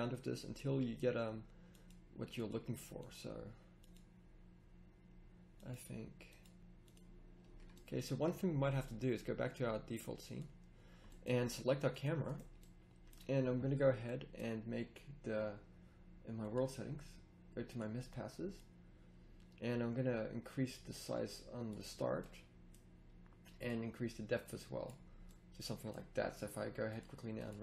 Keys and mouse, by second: 21.9 middle click, 25.3-25.6 middle drag.